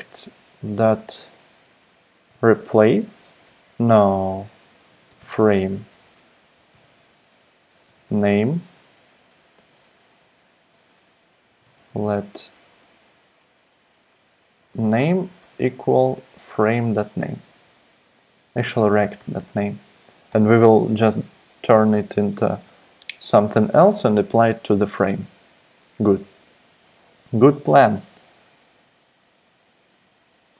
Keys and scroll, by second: 0.0-0.2 typing, 2.0-3.0 typing, 3.8 alt+BackSpace, 3.9 alt+BackSpace, 4.3 alt+BackSpace, 4.6-8.7 typing, 9.5 super+Left, 11.2-12.1 typing, 14.3-15.7 typing, 16.0 super+Right, 18.5-19.7 typing, 20.3 Return.